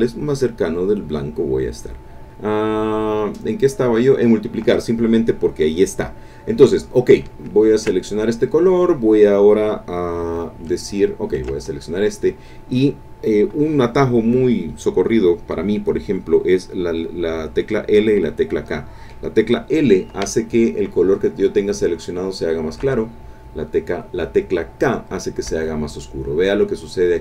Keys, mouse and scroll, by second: 4.1 click, 5.9 click, 7.8 ctrl+click, 11.3 ctrl+click, 22.8 l, 25.5 k.